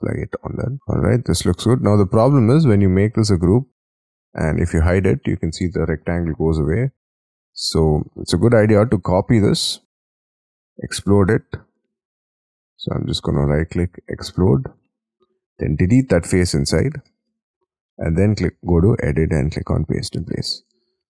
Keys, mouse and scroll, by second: 0.4 space, 0.7 scroll down 5, 0.9 middle click, 1.6-2.3 scroll up 5, 2.5 middle click, 4.9 F2, 6.0 F3, 6.7 double click, 8.5 Escape, 9.4 ctrl+c, 13.3 right click, 13.5 right click, 14.6 double click, 16.0 Delete, 17.0 Escape, 17.3 Escape, 20.8 F2.